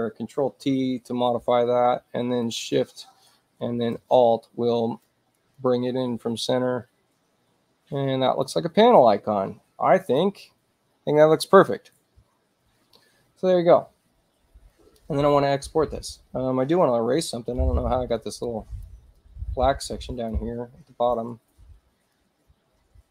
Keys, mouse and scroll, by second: 0.7 ctrl+t, 2.5-8.5 shift+drag, 10.1 click, 17.3 e, 18.2 click, 19.2-20.4 drag, 21.1 click, 22.2-23.1 drag.